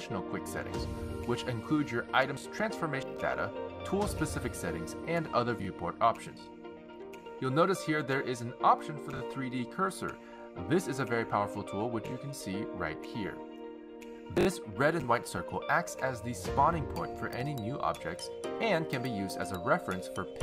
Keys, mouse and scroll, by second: 1.2 click, 4.6 click, 5.7 click, 7.4-8.7 scroll down 3, 11.8 click, 17.0 click, 19.1 shift+a.